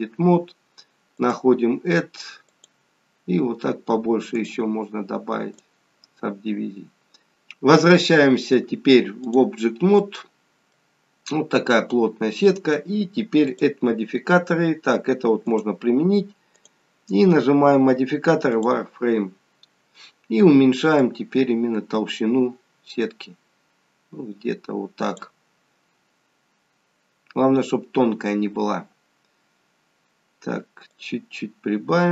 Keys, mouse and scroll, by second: 1.2 click, 7.9 click, 10.1 middle click, 11.0 scroll up 3, 11.7 scroll down 1, 13.0-13.6 scroll down 2, 13.6 click, 15.5 click, 16.6 click, 21.0 click, 25.9-26.5 scroll up 3, 26.5-27.3 scroll down 1, 27.3 scroll up 1, 28.0 scroll down 1, 29.4-30.6 scroll down 5, 31.0 click.